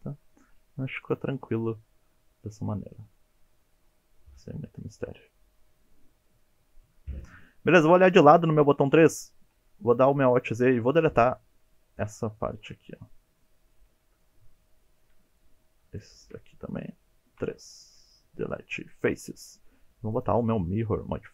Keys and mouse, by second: 2.4-7.2 middle drag, 8.0 KP_3, 9.2 shift+middle drag, 10.1 alt+z, 10.4-12.0 drag, 12.4 shift+middle click, 13.4 middle click, 14.2-15.0 middle drag, 15.5-16.0 shift+drag, 17.4 KP_3, 18.4 Delete, 20.1-21.3 drag.